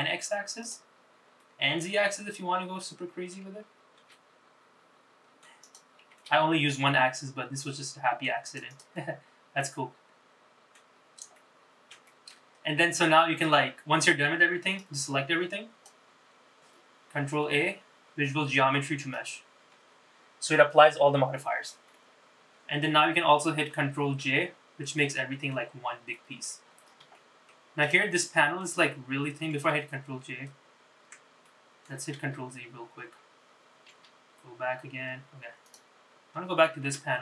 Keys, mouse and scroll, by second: 0.8 click, 1.5-2.9 middle drag, 4.1 s, 6.2 g, 8.9 click, 9.1-10.9 middle drag, 11.1-11.5 scroll down 2, 11.5 middle click, 12.2 shift+middle click, 12.6-13.2 scroll up 2, 13.2-14.3 scroll down 2, 14.9-16.1 drag, 17.3 ctrl+a, 22.0 middle click, 24.5 ctrl+j, 25.1 middle click, 26.3 middle click, 26.7-27.3 scroll up 4, 27.3 shift+middle click, 27.9 click, 28.3 middle click, 30.3 ctrl+z, 31.6 middle click, 32.9 ctrl+z, 34.5 ctrl+z, 35.8 click, 37.0 Tab.